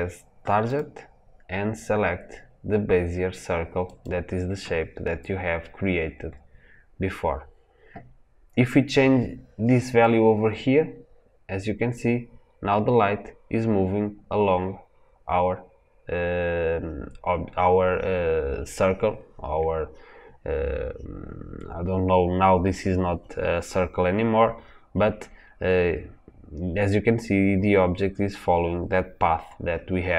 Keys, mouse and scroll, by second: 10.3-12.9 drag.